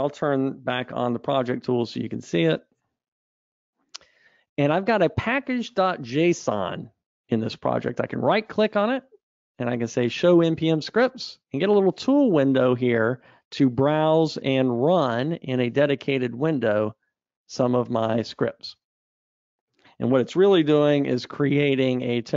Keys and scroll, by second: 1.5 super+1, 19.0 super+F2, 20.8 ctrl+alt+r.